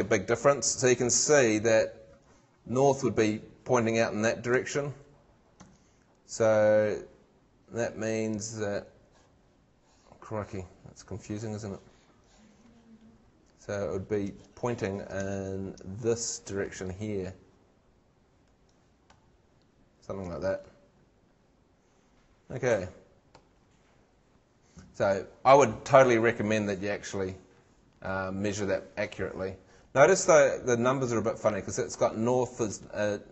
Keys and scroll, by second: 4.5 shift+super+Tab, 14.3 shift+super+Tab.